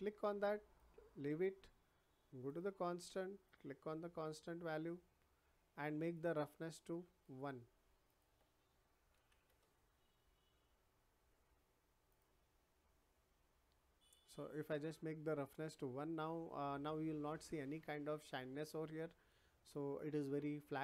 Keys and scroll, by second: 9.1 1, 9.4 Return.